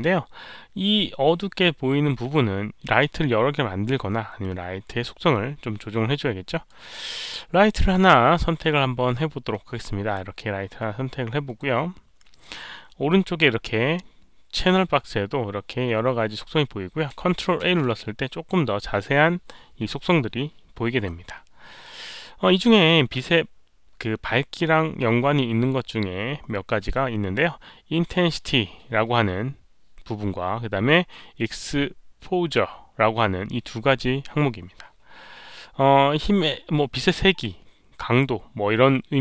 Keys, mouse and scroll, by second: 4.4-6.6 drag, 9.5 click, 11.4 click, 15.2 click, 17.6 ctrl+a, 20.2 ctrl+a, 20.2 click, 22.2 click.